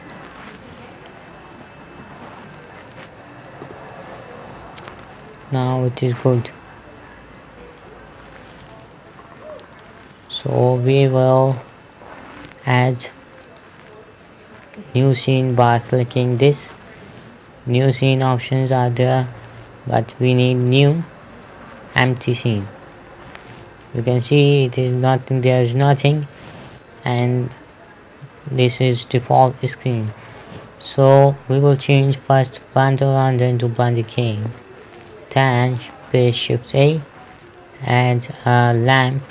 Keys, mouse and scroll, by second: 1.9-3.4 typing, 4.1 Return, 5.3 p, 7.1 Escape, 8.1 right click, 9.6 middle click, 13.9 click, 21.2 click, 22.2 middle click, 23.0-23.3 scroll up 1, 23.4 middle click, 33.3 click, 35.0 middle click, 37.0 shift+a.